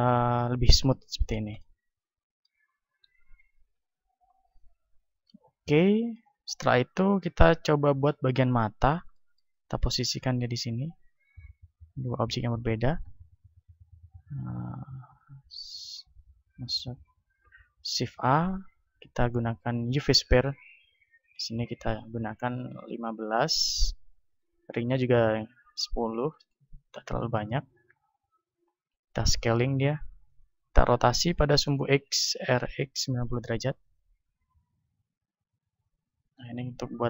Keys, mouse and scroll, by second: 3.7 KP_1, 8.0 click, 9.0-10.6 middle drag, 10.6-12.9 drag, 11.7 shift+a, 12.9 t, 14.4 ctrl+a, 17.6 shift+a, 21.3-22.9 drag, 24.7-26.4 drag, 27.6-30.0 middle drag, 29.1 s, 30.4-32.2 drag, 32.5 r, 33.8-35.7 drag, 34.8 s, 36.4-37.0 drag.